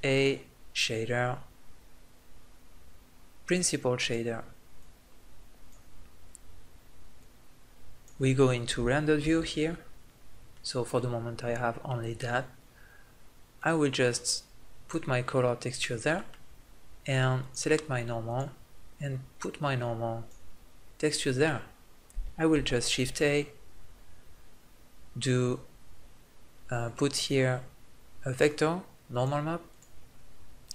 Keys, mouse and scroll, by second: 3.9-8.0 drag, 8.7 click, 9.3 shift+z, 10.3-12.2 middle drag, 13.3-14.7 middle drag, 15.7-18.9 middle drag, 21.0-22.4 middle drag, 22.4 shift+a, 29.5-30.7 drag.